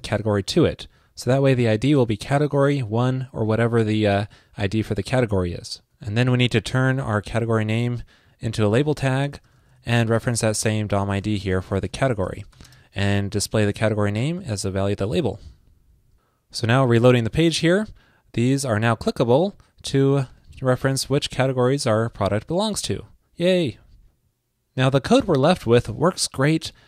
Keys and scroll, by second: 1.5 alt+shift+Left, 3.6 alt+shift+Left, 13.6 alt+shift+Right, 14.5 super+Right, 15.4 super+s, 17.3 super+r.